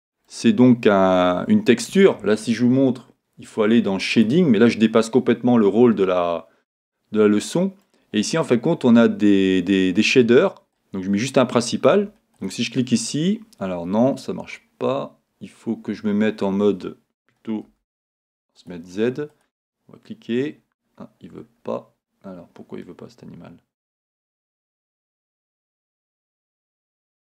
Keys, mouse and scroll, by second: 5.1 click, 6.9-11.1 middle drag, 11.1 click, 12.5 click, 18.7 z, 19.5 click, 20.6-20.9 scroll down 2, 24.3-25.9 scroll up 1, 25.9 Tab.